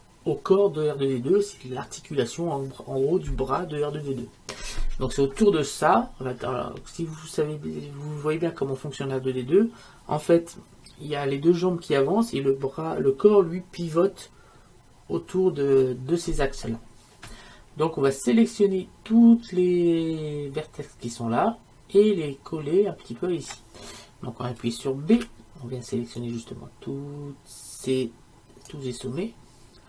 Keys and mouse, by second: 25.2 b.